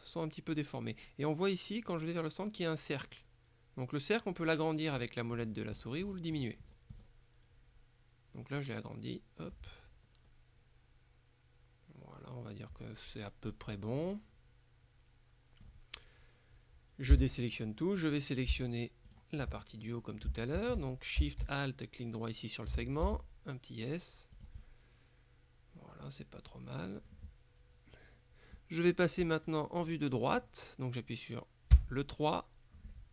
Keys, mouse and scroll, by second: 4.4-5.0 scroll down 2, 5.0-6.2 scroll up 2, 6.2-7.6 scroll down 2, 7.6-8.6 scroll down 1, 8.6-9.2 scroll up 2, 9.2-10.3 scroll down 2, 10.3-10.8 scroll up 2, 10.8-13.8 scroll down 2, 13.8 click, 17.2 a, 17.5 right click, 19.2 alt+shift+right click, 20.4 shift+middle click, 23.1 alt+s, 24.4 click, 31.8 KP_3.